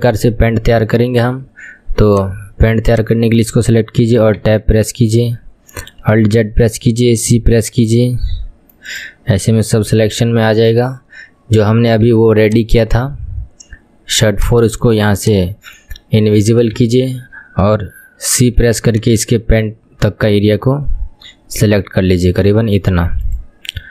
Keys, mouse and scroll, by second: 2.1 click, 2.9 click, 4.4 Tab, 6.4 alt+z, 7.3 c, 10.0 ctrl+z, 10.6 click, 12.1 Tab, 12.5 click, 14.3 click, 15.2 click, 16.9 Tab, 18.5 c.